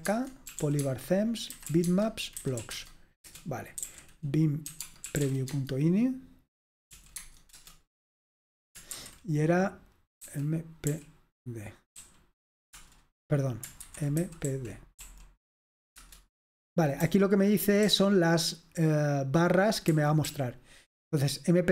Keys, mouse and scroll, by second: 0.0-6.1 typing, 7.2-7.6 typing, 9.0 l, 10.4 typing, 11.8-12.5 typing, 12.7 Return, 13.6-16.0 typing, 17.0-17.8 typing, 20.0 typing, 21.6 typing.